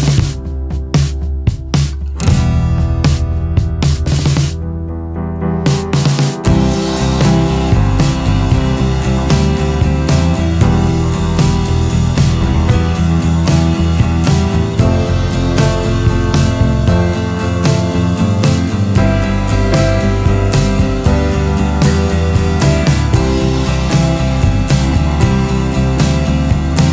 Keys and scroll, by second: 0.7 ctrl+z, 2.6 ctrl+z, 6.4 ctrl+c, 6.6 ctrl+v, 23.1 ctrl+alt+space, 23.5 ctrl+alt+space, 23.6 ctrl+alt+space, 24.3-24.8 alt+space.